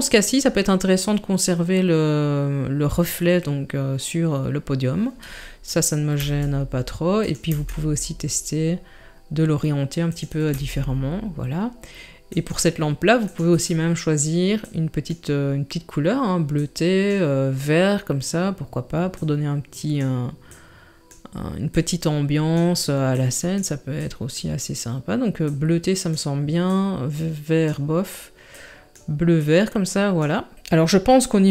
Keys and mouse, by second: 6.2 r, 7.5 g, 10.5 r, 13.3 click.